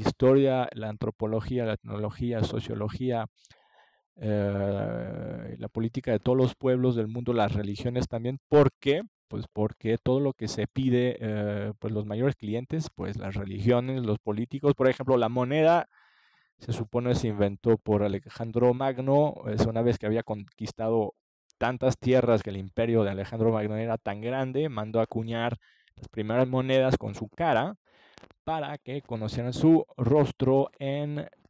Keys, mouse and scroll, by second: 12.9-16.0 middle drag, 16.0 click, 17.1 ctrl+s, 18.2-20.1 middle drag, 20.8-22.8 drag, 27.1-29.3 middle drag, 29.5-31.4 drag.